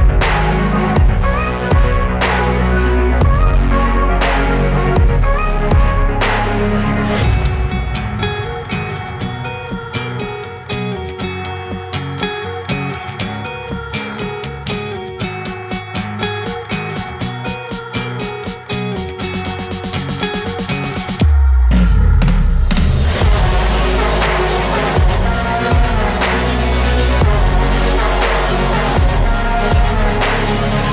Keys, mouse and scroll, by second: 0.1-1.4 scroll up 4, 1.4 scroll up 1, 1.5-2.7 drag, 2.7-3.3 scroll down 1, 3.3 click, 3.8 scroll up 1, 5.9 click, 6.3-8.3 scroll down 4, 8.3-10.4 drag, 10.4 middle click, 11.1 KP_1, 12.3 click, 13.0-14.4 scroll up 5, 14.4 click, 15.3-16.2 scroll up 3, 16.2-17.6 scroll down 2, 17.6-18.1 scroll down 1, 18.1 click, 18.7-20.0 scroll up 5, 20.0 scroll up 1, 20.2-21.0 scroll down 10, 22.9-23.3 scroll down 1, 23.3-27.1 scroll up 5, 29.4-30.2 scroll down 5, 30.2 middle click.